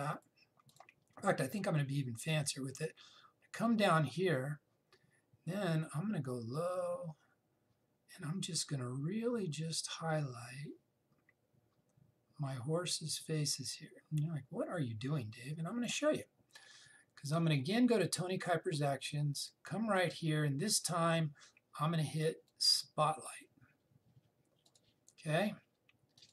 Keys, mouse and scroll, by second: 23.7 click.